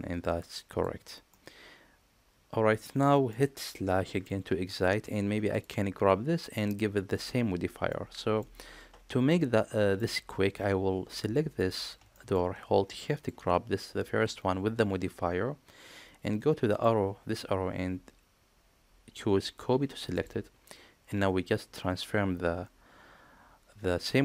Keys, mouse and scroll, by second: 0.0 click, 1.2-3.2 middle drag, 4.0 KP_Divide, 5.4 click, 7.8-8.3 middle drag, 9.2 middle click, 9.6 click, 11.1 click, 12.0 shift+click, 13.0 shift+click, 16.7-20.1 drag.